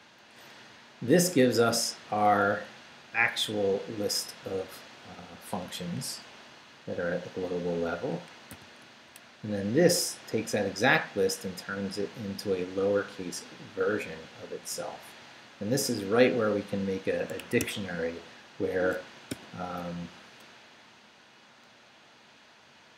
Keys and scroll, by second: 0.6 Down, 1.0 Right, 8.5 shift+v, 10.5 Down, 17.4 Escape, 19.3 o.